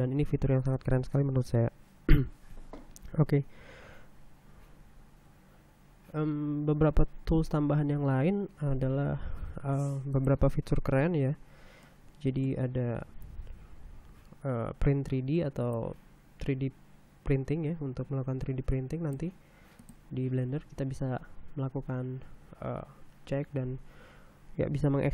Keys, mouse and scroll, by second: 10.2 ctrl+n, 10.8 ctrl+click, 12.5 click, 13.5 t, 14.5-14.9 scroll up 1, 16.3 click, 19.4 click, 20.5 click, 21.8-22.3 scroll down 1, 22.7 scroll up 1.